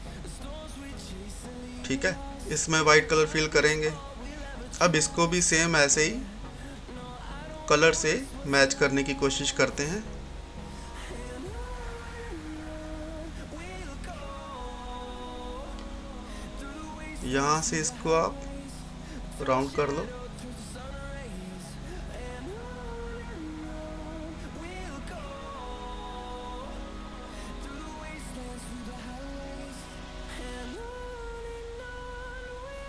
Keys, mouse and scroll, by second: 0.7 typing, 1.0 scroll down 1, 3.0 click, 6.0 scroll down 1, 7.7 right click, 8.2-16.7 drag, 16.5 typing, 17.5 click, 19.7-24.7 drag, 24.7-28.5 drag, 28.5 ctrl+z, 30.5-32.8 drag.